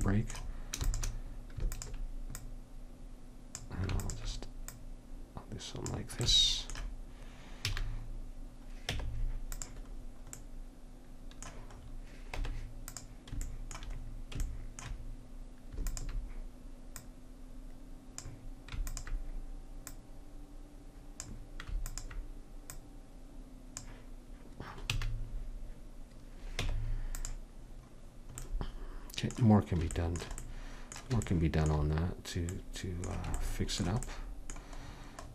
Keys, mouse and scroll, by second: 0.9 alt+space, 1.8-6.6 drag, 6.6-7.7 middle drag, 7.7 a, 9.0 Tab, 12.5 Tab, 16.0-21.8 drag, 22.0-24.7 drag, 25.1 a, 26.7 Tab.